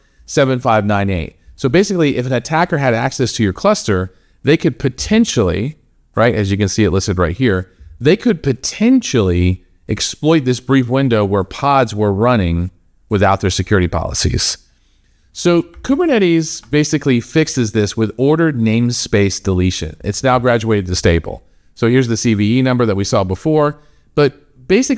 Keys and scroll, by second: 15.7 alt+Tab.